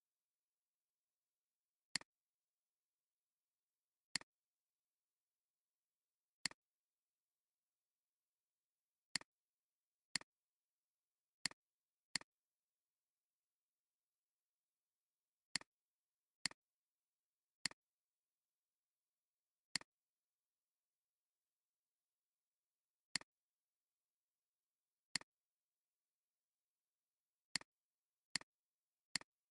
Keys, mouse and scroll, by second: 2.5 click, 4.0 click, 6.4 click, 24.3 scroll down 1.